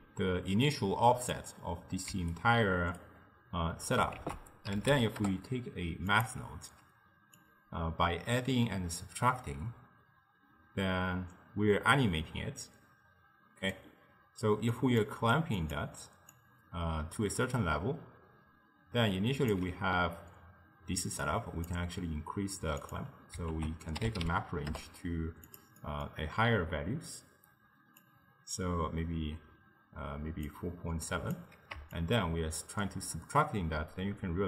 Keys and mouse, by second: 2.2 d, 2.4 right click, 3.1 d, 4.2 ctrl+a, 7.4-10.5 drag, 14.8 click, 15.7 click, 16.4-19.5 drag, 21.3 click, 22.9 click, 23.6 ctrl+a, 25.9-28.0 middle drag, 28.0-31.2 drag, 32.0-34.4 shift+drag.